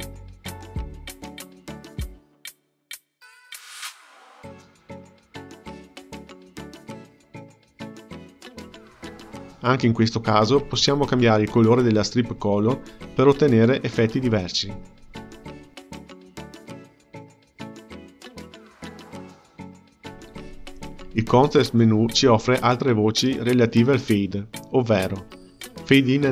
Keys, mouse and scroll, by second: 0.3-1.0 drag, 1.0 space, 3.2 space, 4.4-5.0 drag, 5.0 space, 7.7 space, 8.3 click, 9.7 click, 10.9 click, 15.1-15.7 drag, 15.7 space, 18.5 space, 20.2 click, 23.1 click, 24.0-26.3 right drag.